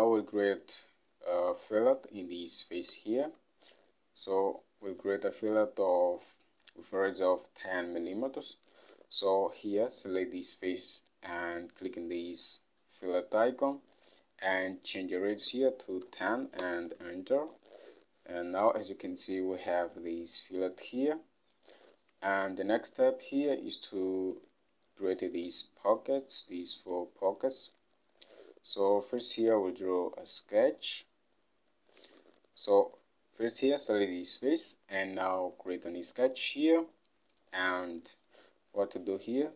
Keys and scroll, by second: 3.3 ctrl+Tab, 16.0-16.9 typing, 22.0 ctrl+Tab, 27.0 ctrl+Tab, 32.3 ctrl+Tab.